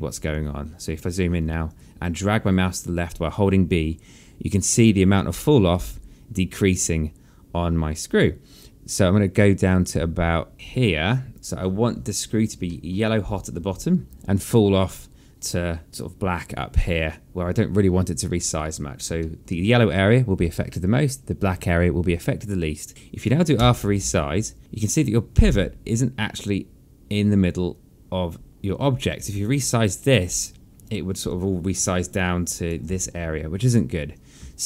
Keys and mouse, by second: 0.8 b, 2.1 b, 2.4 click, 11.8 b, 12.9 alt+click, 13.4 alt+middle click, 13.8 alt+click, 24.3 r, 24.6 alt+click, 32.0 click, 33.7 z.